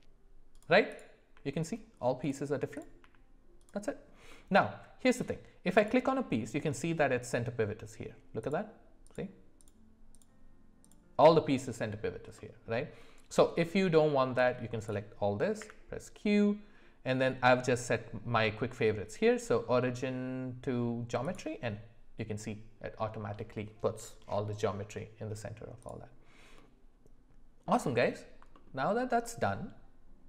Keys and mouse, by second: 1.2 g, 2.7 click, 4.3 middle click, 4.3 g, 5.8 click, 8.4 click, 9.0 click, 9.6 click, 10.1 click, 10.8 click, 12.4 middle click, 13.6 middle click, 14.4 click, 15.6 q, 26.5-27.7 middle drag, 28.8 alt+middle click.